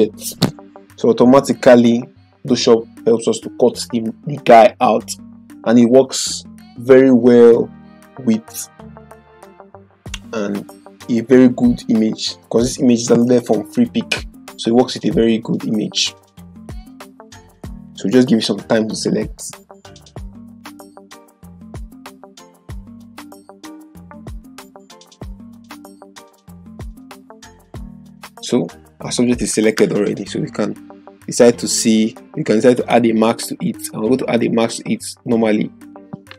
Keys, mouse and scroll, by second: 32.7 click.